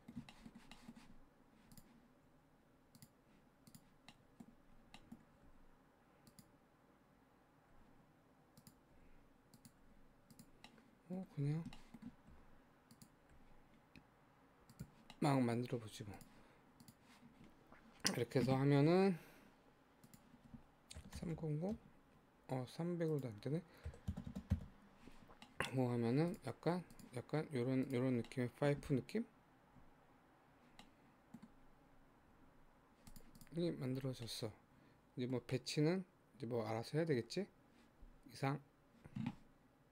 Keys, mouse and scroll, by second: 1.2 scroll up 2, 1.8 click, 2.3 Tab, 3.0 click, 3.7 click, 4.1-5.0 scroll down 5, 4.1 middle click, 5.0 middle click, 5.5 e, 7.7 e, 9.0 e, 9.8 e, 10.7 middle click, 11.5 scroll down 2, 11.8 shift+middle click, 12.3 e, 13.4 e, 15.2 middle click, 16.1 Tab, 16.2 click, 16.8 click, 19.2-20.0 scroll down 3, 20.0-21.3 drag, 21.3 KP_0, 23.1-24.2 drag, 24.2 KP_0, 25.5 middle click, 25.9 Tab, 26.3 click, 26.7 Tab, 27.0 click, 27.9 click, 28.3 middle click, 29.0 z, 30.9 middle click, 31.5-33.2 scroll up 10, 33.2 click, 33.4 click, 33.7-34.3 scroll down 10, 34.3-38.6 middle drag.